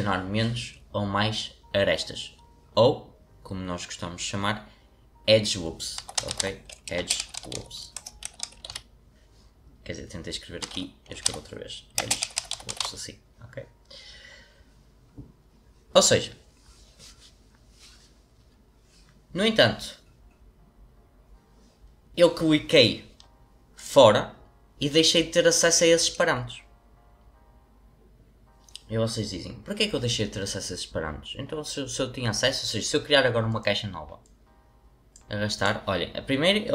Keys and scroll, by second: 5.7-9.2 typing, 11.0-13.3 typing, 14.4-15.2 typing.